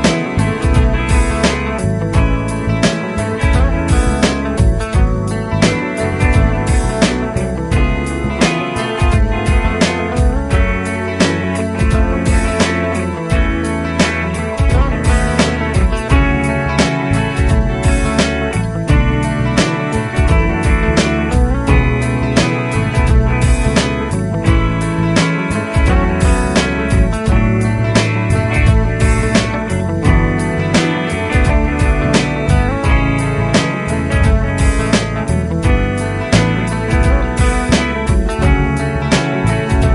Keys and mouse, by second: 1.8 typing, 2.9-5.3 typing, 9.4 typing, 10.8 typing, 25.2 typing, 26.9-28.0 typing, 37.6 right click.